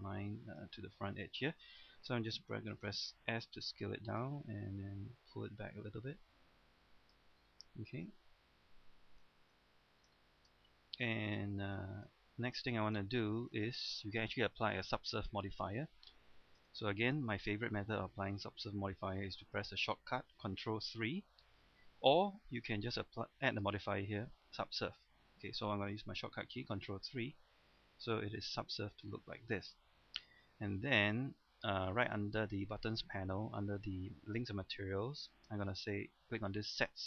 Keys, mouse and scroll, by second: 2.4 s, 4.1-7.4 drag, 7.5-8.0 scroll down 1, 8.0-9.2 scroll up 1, 9.3 shift+middle click, 10.6 middle click, 11.4-12.7 middle drag, 14.3-15.1 scroll down 1, 15.1 middle click, 16.6 Tab, 17.0-19.7 middle drag, 23.5 click, 27.1 ctrl+3, 27.8 middle click, 30.6-35.8 middle drag.